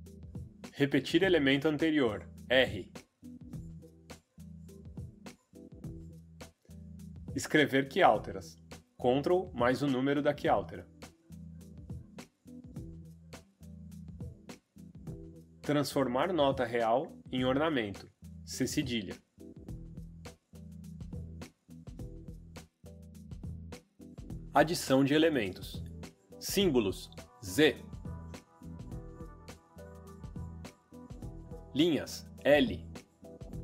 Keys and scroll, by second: 1.4 Right, 1.7 d, 3.2 Left, 5.1 r, 9.0 ctrl+3, 10.1 d, 10.8 Right, 11.1 d, 12.2 Down, 13.3 Escape, 16.5 d, 18.5 ,, 21.1 Escape, 27.6 z, 31.5 Escape, 32.0 l.